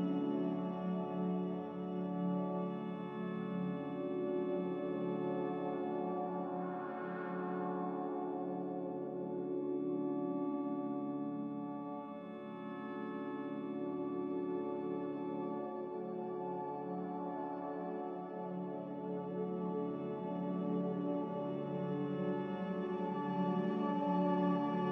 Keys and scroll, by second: 0.9-1.7 typing, 9.3 z, 12.5-13.3 typing, 20.9-21.8 typing.